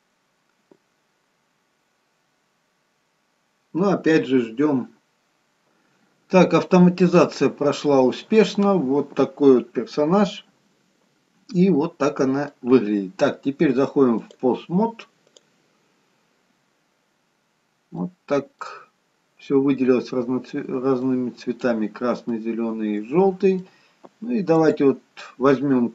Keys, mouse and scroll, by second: 6.6 middle click, 14.2 click, 17.5-18.0 scroll up 2, 18.0 middle click, 18.9-20.7 scroll down 1, 20.7 scroll down 1, 21.6 middle click, 22.4 middle click, 24.6 click.